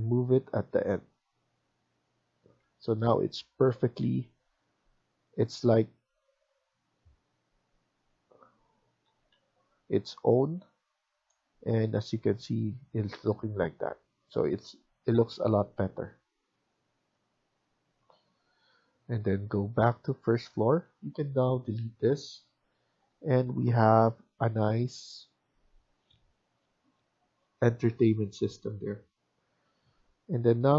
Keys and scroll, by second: 2.5 Escape, 2.7 Escape, 8.9 Escape, 9.3 Escape, 20.7 Escape, 21.0 Escape, 22.3 Delete.